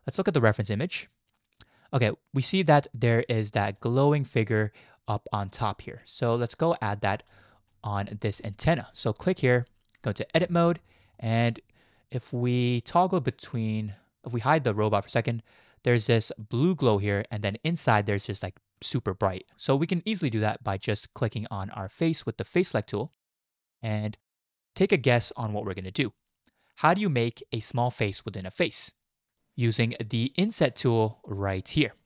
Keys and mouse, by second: 0.4 click, 2.4 click, 3.7 click, 6.8 click, 7.4 shift+middle drag, 8.5 shift+middle drag, 10.4 Tab, 11.2 shift+middle drag, 14.8 click, 20.3 click, 23.1-24.0 drag, 24.1 shift+click.